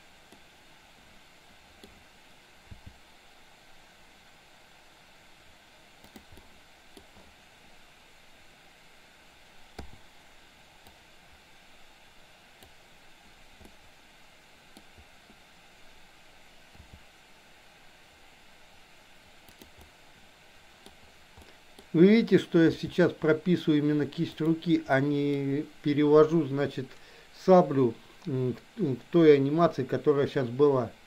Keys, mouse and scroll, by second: 0.5-1.7 middle drag, 2.7 g, 6.3-6.8 middle drag, 9.8 i, 10.8 click, 13.7-14.7 middle drag, 16.8 r, 19.8-20.8 middle drag, 21.5 middle click, 22.7 g, 25.0 scroll up 1, 25.1 middle click.